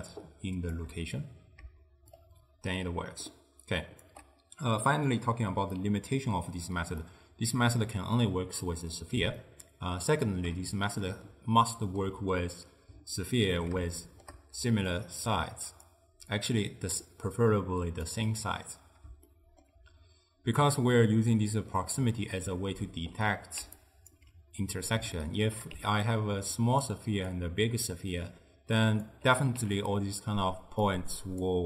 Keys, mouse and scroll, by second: 2.2-5.3 shift+drag, 5.8-8.7 middle drag, 8.7 click, 9.4-14.7 shift+middle drag, 14.7 d, 15.0 click, 15.9 d, 16.4-18.1 drag, 18.1 d, 18.2 d, 19.3-23.7 shift+middle drag, 23.7 d, 23.8-24.2 right drag, 24.2 d, 24.7 d, 25.2-25.8 shift+middle drag, 25.8 d, 26.2-26.9 drag, 26.9-27.3 d, 27.4-29.1 drag, 29.1-31.6 typing, 30.9 click.